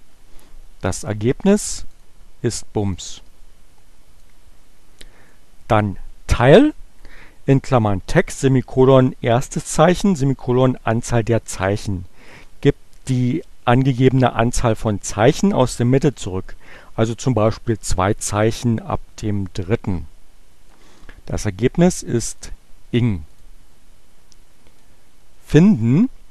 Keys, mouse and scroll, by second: 0.4 Return, 1.9 click, 2.8 click, 4.0-5.6 drag, 20.6 Return, 22.1 click, 23.1 click, 24.8-26.1 drag.